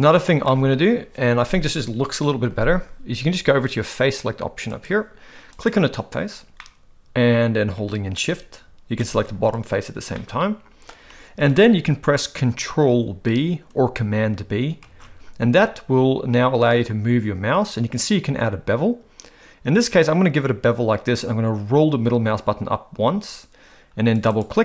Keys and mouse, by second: 0.4 shift+middle click, 5.6 click, 6.6-7.8 middle drag, 9.0 shift+click, 10.2 middle click, 14.8 ctrl+b, 24.3 click.